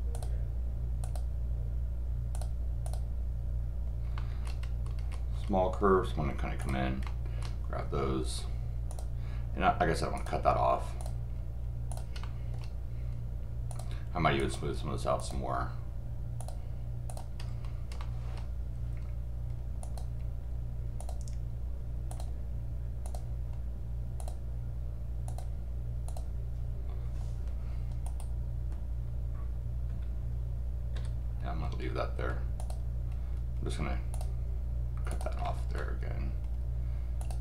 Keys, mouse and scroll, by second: 0.1 click, 1.0 click, 2.3 click, 2.8 click, 4.1-4.4 scroll up 1, 4.6 scroll up 2, 5.0-5.4 scroll down 4, 6.6 drag, 7.0 middle click, 8.9 click, 10.1 click, 11.9 click, 12.2 middle click, 13.7 drag, 14.4 click, 15.2 click, 16.4 click, 17.1 click, 17.4 scroll up 2, 18.0 middle click, 18.9 scroll down 1, 19.8 click, 21.0 click, 22.1 click, 23.0 click, 24.2 click, 25.3 click, 26.1 click, 28.0 right click, 32.6 click, 34.1 click, 35.1 click, 35.4 middle click, 35.7-37.2 scroll down 1, 37.2 drag.